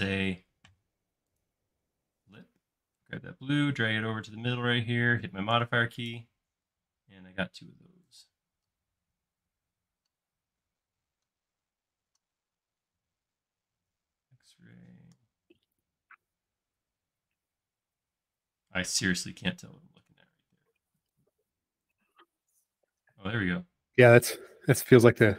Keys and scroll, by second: 7.0 alt+space, 8.1 p, 11.9 space, 14.0 x, 22.5-23.3 typing.